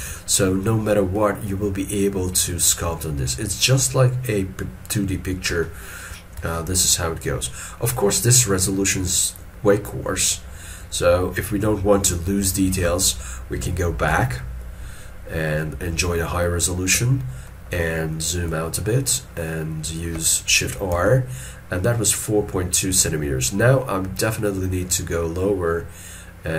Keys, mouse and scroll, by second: 0.0 alt+e, 5.7 shift+middle click, 6.5 shift+middle click, 14.2 ctrl+z, 17.5 middle click, 19.1 middle click, 21.0 shift+r.